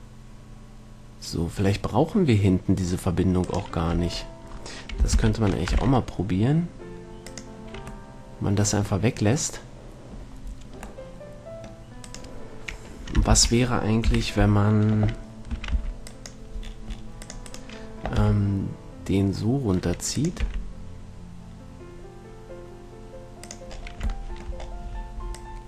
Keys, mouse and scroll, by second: 4.3 Tab, 4.3-5.6 right drag, 5.6 ctrl+l, 6.1 x, 12.3-14.0 right drag, 13.7 ctrl+l, 14.3 KP_3, 15.8 a, 16.1 c, 17.9-19.7 right drag, 18.5 g, 20.6-22.9 drag, 20.7 r.